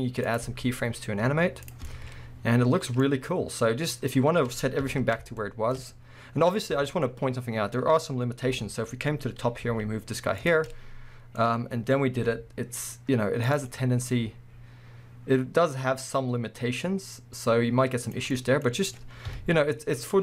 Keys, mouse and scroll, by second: 0.3 click, 0.4 g, 1.7 click, 1.8-10.5 middle drag, 4.3-4.8 scroll down 2, 4.8 KP_1, 5.8-6.7 scroll up 2, 6.7 scroll up 1, 8.5 KP_7, 9.7 g, 10.5 click, 10.7 scroll up 2, 10.7-13.6 middle drag, 11.4-12.1 scroll down 2, 12.1 scroll down 1, 12.2 g, 13.6 click, 13.7-17.4 middle drag, 14.2 g, 18.2 click, 18.4 middle click, 19.3 KP_1, 19.8 scroll up 1.